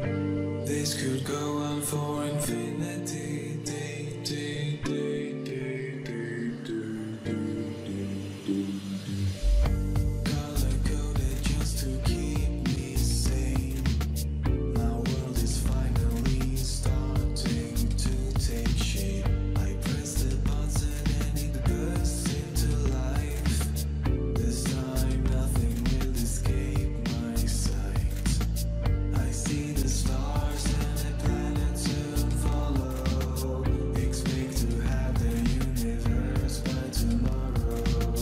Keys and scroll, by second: 2.6-3.3 typing, 4.6 v, 8.9-10.3 typing, 22.2 Down.